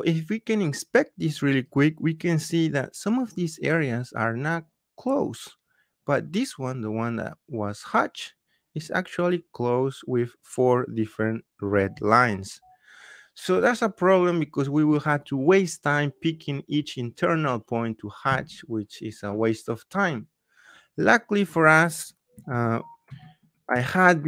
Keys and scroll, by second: 22.4 ctrl+z.